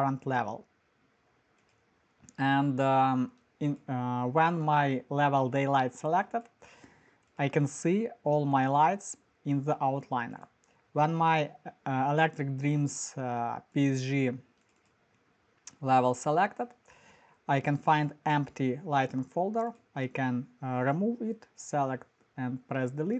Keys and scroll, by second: 21.5 Delete.